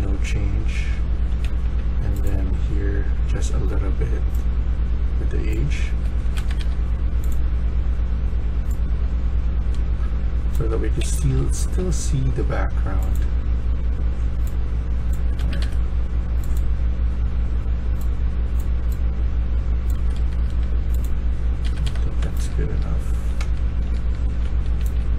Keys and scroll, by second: 0.8-1.9 typing, 5.7 s, 6.3 Escape, 6.5 Escape, 10.5 Escape, 10.5-11.8 typing, 15.3 Escape, 15.5 Escape, 19.8 Escape, 20.1 Escape, 21.5 Escape, 21.7 Escape, 22.0-25.1 typing.